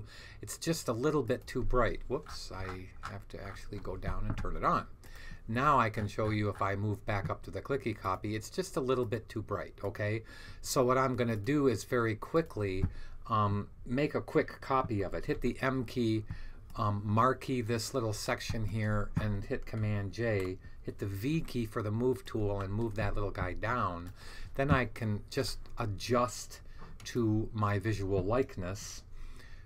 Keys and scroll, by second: 15.2 m, 20.2 super+j, 21.2 super+v.